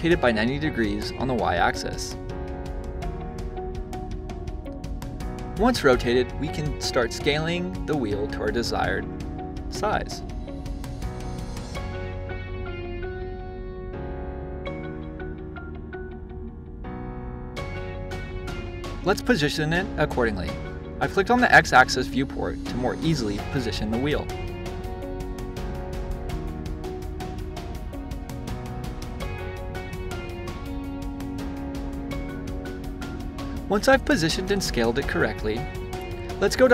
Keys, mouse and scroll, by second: 0.6-3.7 drag, 5.4-7.1 drag, 12.1 click, 13.2 click, 13.9-16.5 middle drag, 16.5-19.4 drag, 20.8 click, 22.7 click, 23.9 s, 26.0 click, 27.1 click, 29.6-31.5 middle drag, 31.5 click, 34.0-36.7 middle drag.